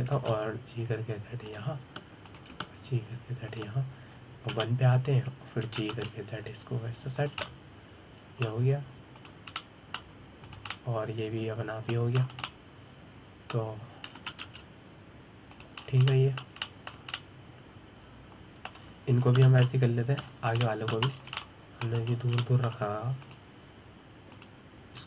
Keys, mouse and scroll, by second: 0.9 click, 1.8 g, 3.9 click, 4.2 g, 6.2 KP_1, 7.3 g, 9.1-10.8 middle drag, 10.8 click, 11.3 middle click, 12.1 click, 12.4-13.9 middle drag, 13.9 scroll down 2, 14.1-15.8 middle drag, 15.8 g, 17.5 scroll down 3, 17.8-21.1 middle drag, 21.1 ctrl+KP_7, 21.9 scroll up 4, 22.3 shift+middle click, 22.8 scroll up 5, 23.1 shift+middle click, 23.8-24.1 scroll down 2, 24.1 shift+middle click, 24.9 click.